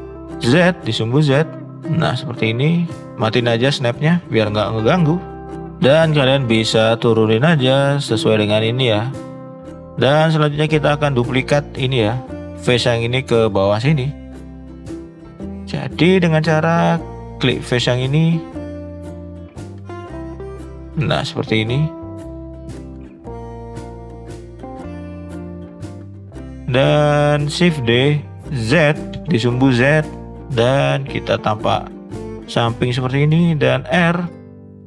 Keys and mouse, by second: 2.2 middle click, 3.5 click, 4.8 click, 5.5 shift+middle click, 5.9-8.1 drag, 9.9 middle click, 10.4 shift+middle click, 10.8 middle click, 11.6 shift+middle click, 12.1 middle click, 13.0 shift+middle click, 14.0 shift+middle click, 14.6 middle click, 16.0 click, 16.5 middle drag, 18.3 shift+click, 19.8 shift+click, 20.2 shift+click, 20.9-21.2 middle drag, 21.6 shift+click, 22.8 shift+click, 24.7 shift+click, 25.5-26.6 middle drag, 26.8 middle click, 27.2 shift+middle click, 27.8 shift+d, 30.7 middle click, 32.5 shift+middle click, 33.6 r.